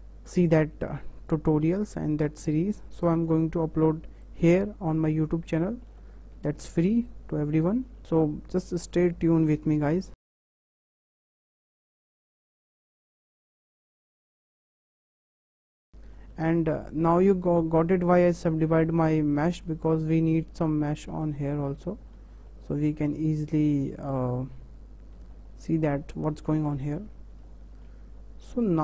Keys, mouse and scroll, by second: 1.3 click, 1.9 click, 3.6 click, 4.3 click, 7.5 click, 10.3 click, 10.5 ctrl+z, 10.7 click, 13.8 click, 14.0 click, 14.4 click, 14.5 click, 14.7 click, 14.8 click, 14.9 click, 15.4 click, 15.6 click, 19.9 click, 20.5 click, 23.6 click, 24.2 click.